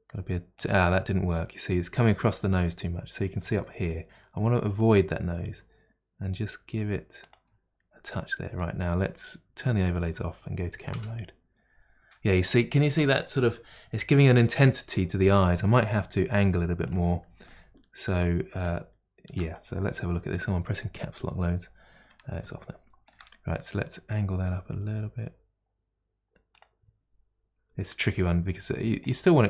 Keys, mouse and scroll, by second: 3.7 g, 8.0-9.8 middle drag, 9.8 click, 10.9 KP_0, 16.2-18.2 middle drag, 18.7 middle click, 22.5-24.2 shift+middle drag, 24.2-28.3 drag, 28.3 g.